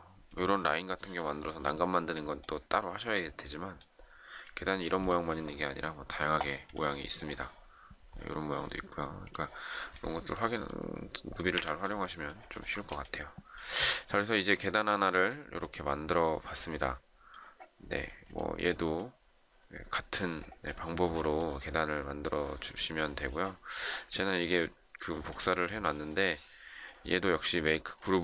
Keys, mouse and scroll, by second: 11.5 Delete, 12.5 shift+middle click, 14.4 shift+middle click.